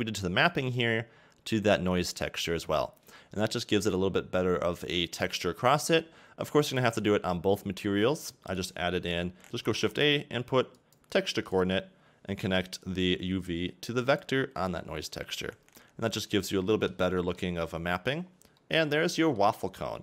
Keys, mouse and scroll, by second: 6.6 click, 9.0 x, 9.4 shift+a, 13.1 scroll up 2, 14.2 click, 15.5 scroll down 2, 15.7 middle click, 16.7 a, 16.9 a, 17.2 middle click, 17.9-18.3 scroll up 1, 18.3 scroll down 4, 18.6 middle click, 19.8 middle click.